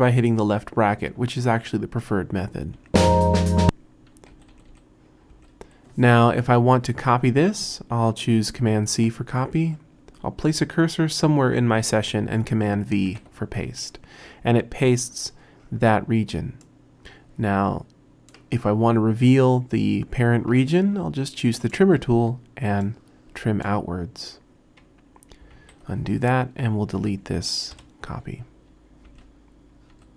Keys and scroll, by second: 2.8 [, 4.3-5.3 typing, 8.8 super+c, 13.1 super+v, 25.6 super+z, 27.7 BackSpace, 29.1 r, 29.9 BackSpace.